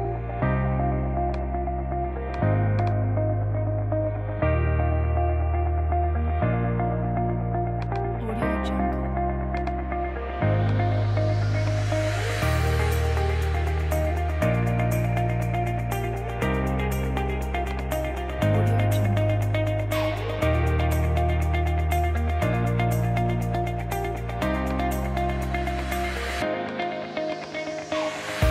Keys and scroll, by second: 3.0 space, 5.4 space.